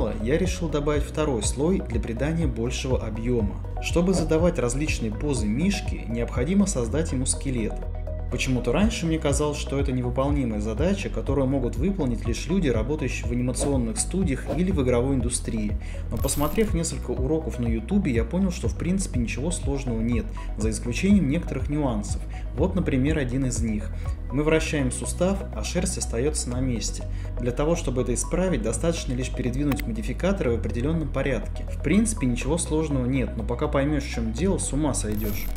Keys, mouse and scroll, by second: 0.2 click, 0.6 click, 1.0 f, 1.2 click, 1.6 ctrl+z, 2.0 click, 2.6 click, 3.0 f, 3.4 click, 4.0 click, 4.6 r, 5.2 r, 6.2 Escape, 7.2 r, 8.0 Escape, 8.6 shift+middle click, 10.4 r, 11.6 Escape, 12.2 click, 12.4 r, 17.4-19.0 typing, 17.8 Tab, 24.5 r, 30.7 click, 31.7 middle click, 32.7 alt+r, 34.1 r, 34.7 click, 35.5 alt+r.